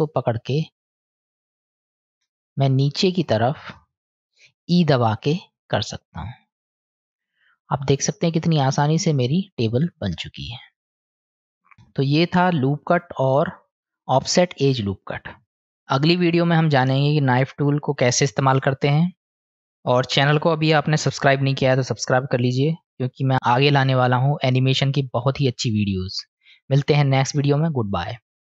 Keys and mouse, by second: 1.8 shift+click, 2.7 middle click, 5.1 e, 7.8 click, 8.8 middle click, 9.9-11.7 middle drag, 13.7 click.